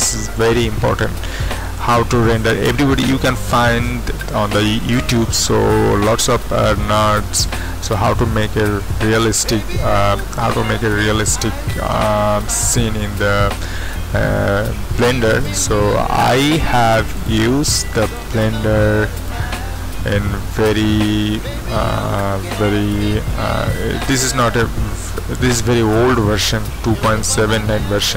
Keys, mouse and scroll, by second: 8.5-15.3 middle drag, 15.3 click, 17.2 click, 18.0 click, 19.2 click, 24.4 click, 26.1 click, 26.4-27.9 drag, 28.0 click.